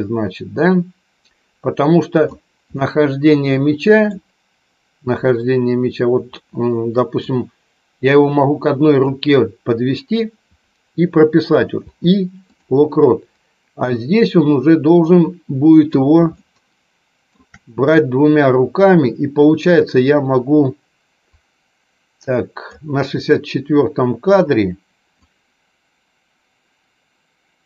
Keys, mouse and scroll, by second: 2.7-4.1 middle drag, 7.1-9.0 drag, 13.8-16.1 drag, 21.3-22.8 drag, 25.0-27.6 drag.